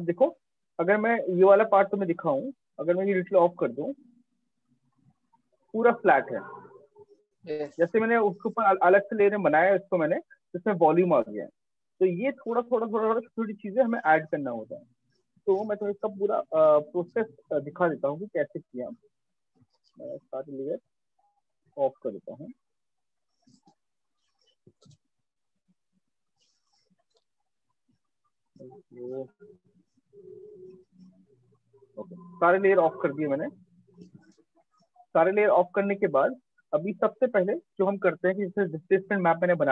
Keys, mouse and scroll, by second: 2.3 click, 6.7 click, 11.8 right click, 12.8 alt+click, 14.0 alt+click, 18.4 click, 19.6 click, 21.7 click, 23.8 click, 25.3 click, 28.5 click, 32.4 alt+click, 33.3 right click, 34.0 alt+click, 36.6 click.